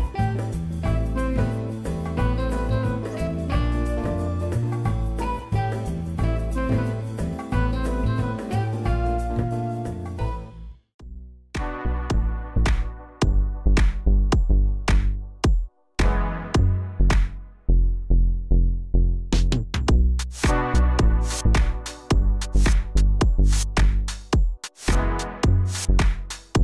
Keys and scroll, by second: 1.6 3, 2.2 F3, 2.8 r, 6.2 w, 7.2 alt+F3, 7.5 w, 12.0 p, 12.3 z, 20.8 f, 21.1 z, 21.4 F3.